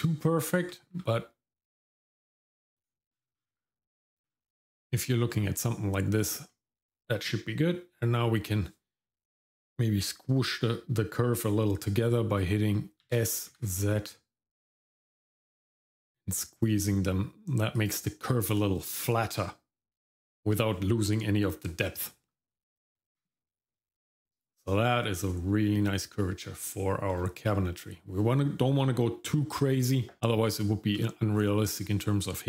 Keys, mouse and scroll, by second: 0.6-1.4 scroll down 1, 0.6 g, 3.1-3.6 scroll down 4, 4.0 middle click, 4.3-4.7 scroll down 1, 4.7 middle click, 5.3-5.9 scroll down 1, 13.0 s, 23.0 Tab, 27.1-30.2 scroll down 2, 30.3 shift+middle click, 31.3-32.4 scroll up 1.